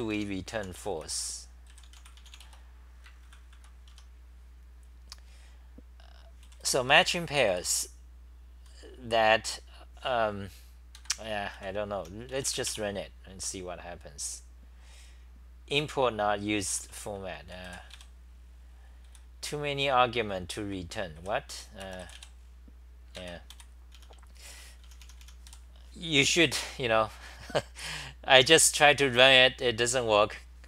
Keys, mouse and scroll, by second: 0.3-1.1 typing, 3.5 ctrl+c, 3.9 Home, 6.4 g, 6.6 g, 7.0 g, 8.5-9.2 typing, 11.0 ctrl+g, 11.6 c, 12.0 t, 16.5-19.1 typing, 21.0-22.0 typing, 23.2 ctrl+g, 23.7-26.0 typing.